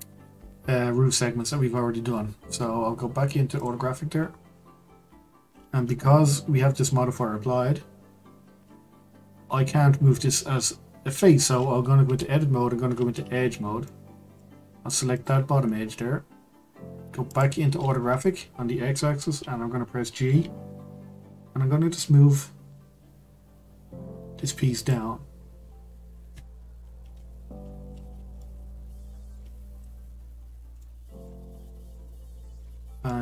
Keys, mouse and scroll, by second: 0.8-3.5 scroll up 1, 3.5 click, 4.1-7.3 scroll up 1, 12.0 Tab, 13.8-15.1 middle drag, 15.1 click, 15.7-16.4 scroll down 2, 16.4 scroll down 2, 17.3 click, 17.9-20.1 scroll up 1, 20.1 scroll up 3, 20.2 g, 25.9-26.5 scroll up 2, 28.4-30.4 shift+middle drag, 30.4-30.8 scroll down 2, 30.8-32.7 middle drag, 32.7-33.1 scroll down 3, 33.1-33.2 middle drag.